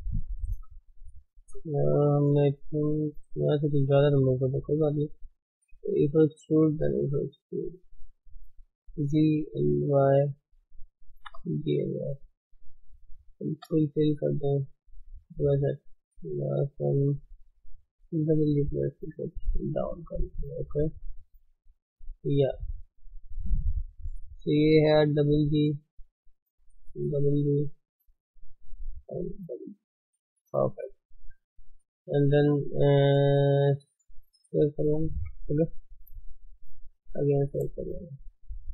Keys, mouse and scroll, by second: 0.4-2.1 middle drag, 2.1 ctrl+z, 3.4 ctrl+shift+z, 4.2 scroll up 2, 4.5 shift+middle click, 5.4 click, 5.7 e, 6.7 e, 8.7 g, 10.3 g, 10.8 click, 11.2 g, 12.5 click, 13.6 f, 13.9 f, 14.4 middle click, 14.9 Tab, 15.2 middle click, 15.5 middle click, 15.9-16.2 scroll up 2, 16.2 click, 16.5 middle click, 17.0 middle click, 17.8 g, 19.0 Tab, 19.2-21.9 middle drag, 19.2 scroll down 2, 19.9 scroll down 2, 21.9-22.3 scroll up 3, 22.3 Tab, 22.5 scroll down 1, 22.7-24.2 middle drag, 24.2 click, 25.0 g, 26.6 click, 26.8 g, 27.7-28.8 middle drag, 28.8 click, 29.1 g, 29.8 scroll down 1, 30.0-30.4 middle drag, 30.4 Tab, 31.1 middle click, 31.2-32.1 middle drag, 31.8 ctrl+shift+s, 35.4 KP_1, 35.8 scroll down 3, 36.5 shift+c, 37.8 shift+middle click, 38.0-38.4 scroll up 2, 38.4-38.7 shift+middle drag.